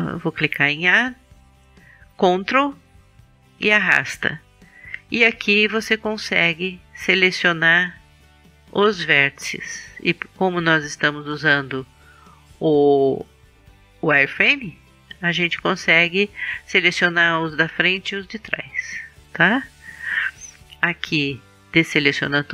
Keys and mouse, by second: 0.4 a, 3.7 click, 4.5-6.1 middle drag, 6.3-8.2 drag, 21.6 a.